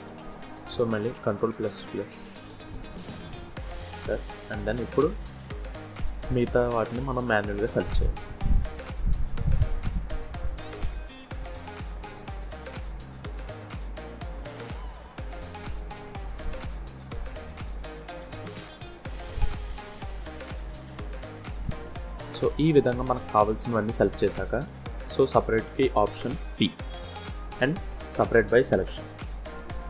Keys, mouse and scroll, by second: 1.1 ctrl+KP_Add, 1.4 ctrl+KP_Add, 2.3 middle click, 3.5 ctrl+KP_Add, 4.3 scroll up 1, 5.4 shift+click, 6.5 shift+click, 7.3 middle click, 8.4 shift+click, 8.8 shift+click, 9.8 shift+click, 10.6 shift+click, 11.7 middle click, 12.7 shift+click, 13.2 scroll up 1, 13.3 middle click, 14.6 shift+click, 15.8 middle click, 17.3 shift+click, 17.9 middle click, 19.0 shift+middle click, 20.2 scroll down 1, 21.4 shift+click, 22.1 middle click, 22.9 scroll down 1, 23.1 scroll up 3, 23.6 shift+middle click, 26.1 p.